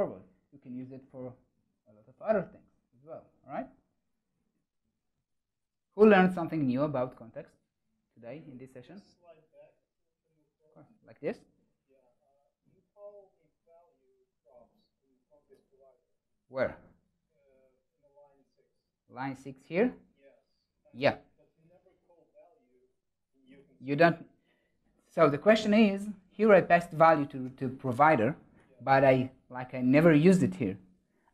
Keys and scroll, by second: 26.3 ctrl+alt+shift+Right, 27.4 ctrl+alt+shift+Left.